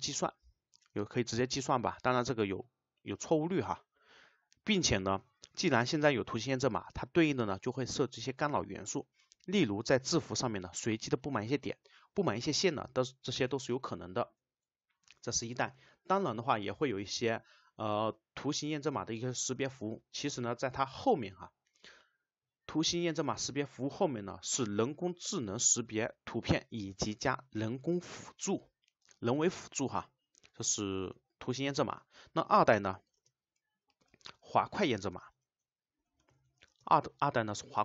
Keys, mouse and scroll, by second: 15.4 click, 33.2 space, 34.1 shift+;, 35.1 space, 36.8 space, 37.7 Return.